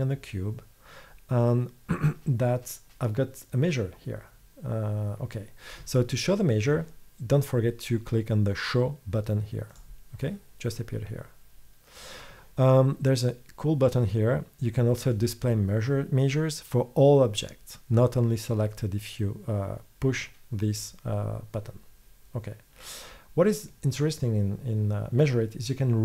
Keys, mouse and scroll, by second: 11.1 click, 23.8-26.0 middle drag.